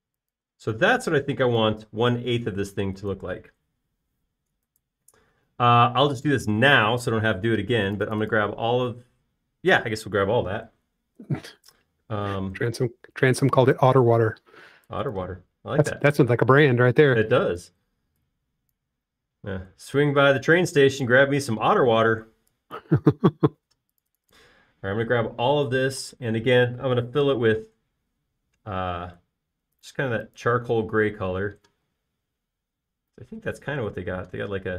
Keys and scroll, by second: 1.4 typing, 6.6 space, 13.5 e, 24.5 space, 27.0 b, 33.2 space.